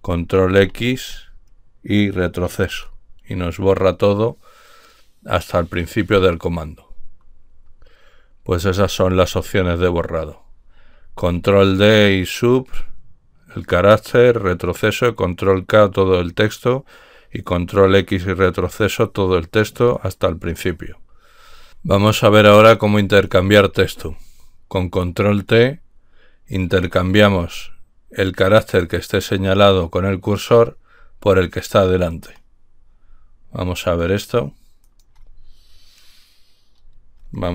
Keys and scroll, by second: 0.5 ctrl+x, 2.6 ctrl+x.